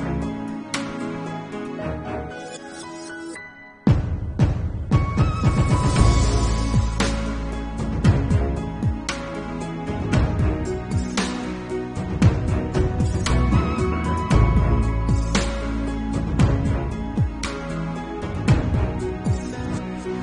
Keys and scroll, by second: 0.3 ctrl+s, 6.1 ctrl+s, 6.9 ctrl+alt+z, 7.4 ctrl+s, 11.3 ctrl+s, 12.0 ctrl+s, 12.5 ctrl+s, 13.3 space, 18.4-18.8 typing, 18.8 Return, 19.9 b.